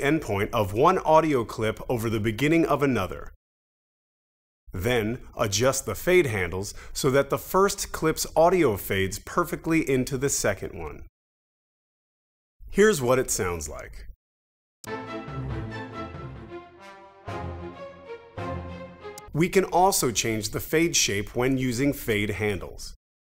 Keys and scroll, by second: 14.8 space, 19.1 space.